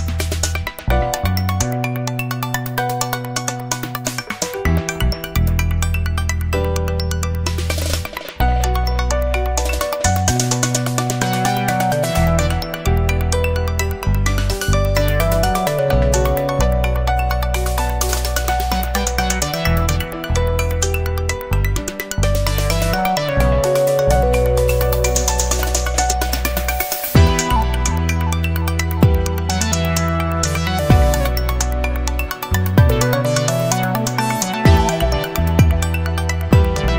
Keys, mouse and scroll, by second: 0.3 click, 1.6-3.1 drag, 3.9 click, 4.9 click, 5.7 o, 6.2 click, 7.3 1, 9.7-10.8 drag, 11.1 click, 11.9 click, 12.7 5, 13.1 click, 14.1 click, 20.9 middle click, 20.9 scroll down 1, 21.5-22.5 middle drag, 24.9 click, 25.8 ctrl+click, 28.6 click, 29.1 click, 29.9 click, 30.8 click, 32.1 click, 32.7 click, 33.6 click, 35.2 ctrl+click.